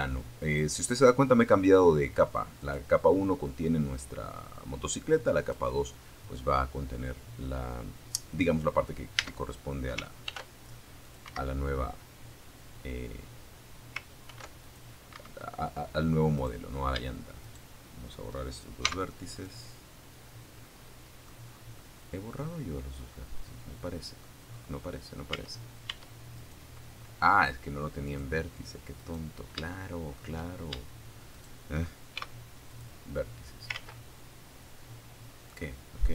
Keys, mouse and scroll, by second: 0.8 click, 3.6 click, 6.5-7.0 scroll up 1, 7.4 Tab, 8.4 ctrl+r, 9.5 Escape, 12.5 ctrl+r, 12.8 ctrl+click, 13.3 ctrl+Escape, 14.5 click, 15.6 shift+click, 15.7 shift+middle click, 17.5 click, 18.8 middle click, 19.2 scroll up 1, 19.7 scroll down 1, 21.9 middle click, 22.7-23.1 scroll up 1, 23.5 Tab, 24.5 click, 26.3 click, 27.2 right click, 27.9 shift+click, 28.3 shift+scroll up 2, 29.5 shift+right click, 30.3 shift+x, 30.9 click, 32.1 ctrl+z, 33.8 click, 34.5-34.8 scroll down 2, 34.9 shift+middle click.